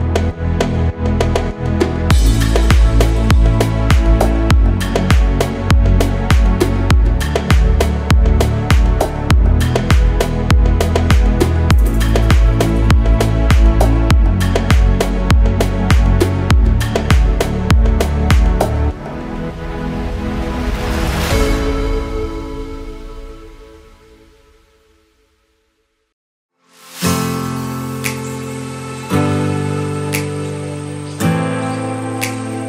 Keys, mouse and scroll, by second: 0.9 Tab, 3.0 click, 3.6-4.4 middle drag, 4.6 click, 5.0 click, 6.9 click, 8.0 click, 9.7-11.2 drag, 12.0-13.1 drag, 14.1 click, 14.7-17.0 drag, 17.9 click, 20.2 click, 21.9-23.1 drag, 24.7-26.4 drag, 27.4 KP_1, 28.9-31.5 drag, 32.2 scroll down 1.